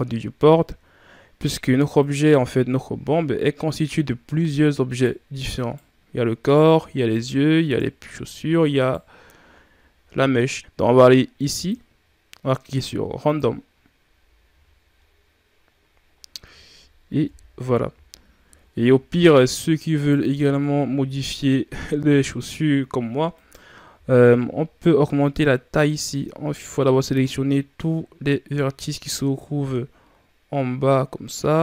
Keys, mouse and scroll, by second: 1.8 right click, 2.3 shift+scroll down 3, 2.7 scroll up 4, 4.7 right click, 5.4 right click, 6.2 right click, 6.8 right click, 7.4 right drag, 7.9-8.2 shift+scroll up 7, 8.6 right click, 9.3 shift+scroll up 2, 10.0-11.3 scroll down 3, 11.3-14.3 drag, 14.3 a, 14.8 scroll down 4, 15.9 scroll up 5, 17.1 KP_3, 17.9 shift+scroll down 5, 18.9 shift+scroll down 6, 19.8 right click, 20.1 Tab, 20.7 shift+scroll down 4, 21.0-21.9 scroll up 5, 21.9 z, 23.2 right click, 23.7 c.